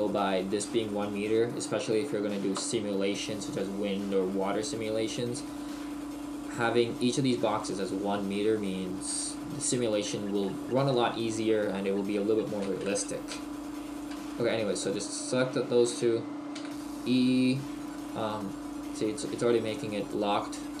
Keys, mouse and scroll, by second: 13.9 right click, 14.3 shift+right click, 16.5 e.